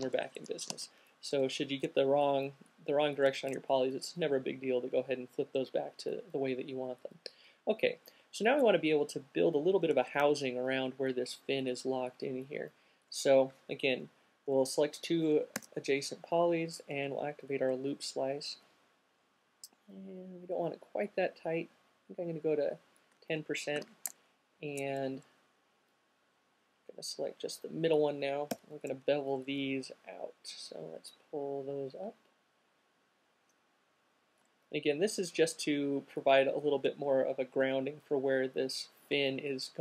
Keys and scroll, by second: 0.0 q, 15.8 alt+c, 24.0 alt+q, 24.1 alt+shift+super+fn+Down, 28.6 alt+b.